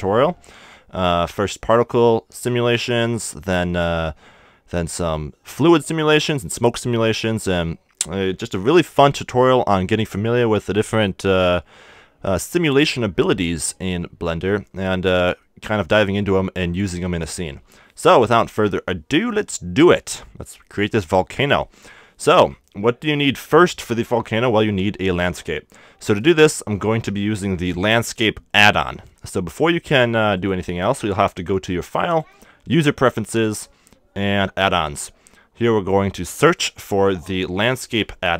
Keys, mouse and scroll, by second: 22.6-25.0 middle drag, 29.0 x, 32.1-33.9 drag.